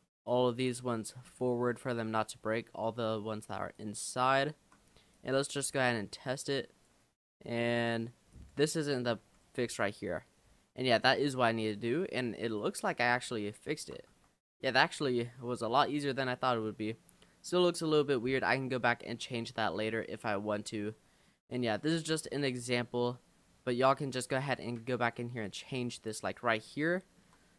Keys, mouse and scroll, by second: 0.6-0.9 scroll down 2, 1.0 shift+middle click, 1.9 shift+click, 3.8 shift+click, 4.4 shift+click, 5.2 click, 7.2 s, 9.3 g, 12.5 click, 12.9-13.6 scroll up 7, 13.6 shift+middle click, 14.1 Tab, 14.9-15.4 middle drag, 15.4-16.3 scroll down 10, 16.3 middle click, 16.8-17.2 scroll up 4, 17.2 middle click, 17.6-18.3 scroll down 3, 18.3-19.1 middle drag, 19.1-20.0 scroll down 8, 20.0-20.9 shift+middle drag, 20.9-21.2 scroll up 1, 21.2-21.6 middle drag, 21.6 scroll up 2, 21.9 middle click, 22.4-22.8 scroll up 5, 23.0 scroll down 2, 23.5 Tab, 24.6 click, 25.0 shift+click, 25.4 shift+click, 26.3 click, 26.8 shift+middle click.